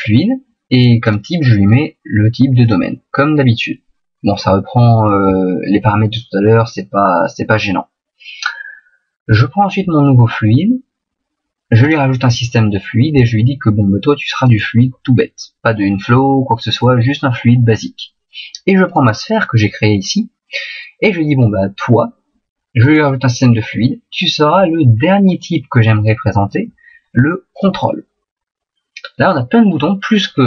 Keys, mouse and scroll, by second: 9.3 right click, 18.9 right click, 19.3 right click.